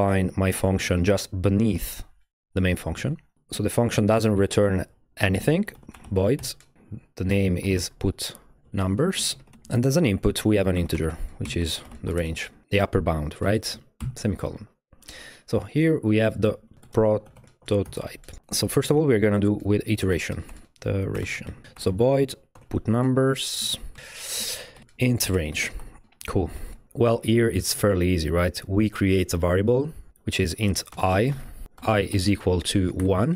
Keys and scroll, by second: 5.4-12.7 typing, 14.0 shift+,, 16.5-26.5 typing, 26.6 alt+shift+e, 29.9-33.3 typing, 30.7 Tab.